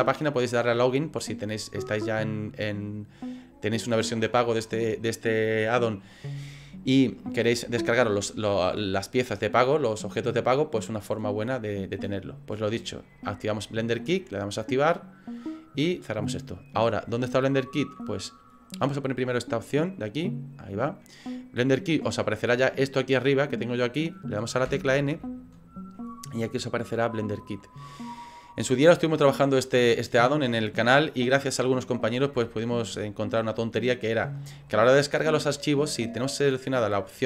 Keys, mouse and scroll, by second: 19.7 click, 27.2 click, 32.3 scroll down 2.